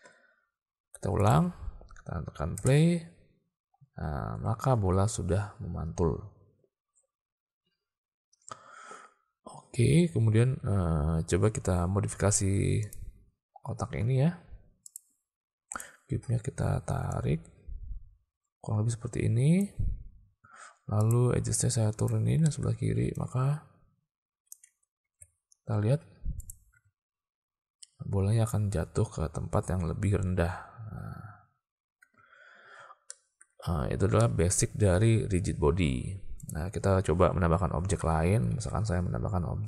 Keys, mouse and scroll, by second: 1.3 click, 2.6 space, 4.8 alt+a, 8.7 space, 12.9 click, 13.7 Tab, 14.9 click, 15.8 click, 17.1-19.7 drag, 21.0 click, 22.1 click, 22.5 click, 23.2-24.6 drag, 24.7 Tab, 25.1 alt+a, 26.4 click, 26.8 space, 32.1 space, 33.2 shift+middle drag, 34.3 middle click, 36.6 click, 38.6 shift+a.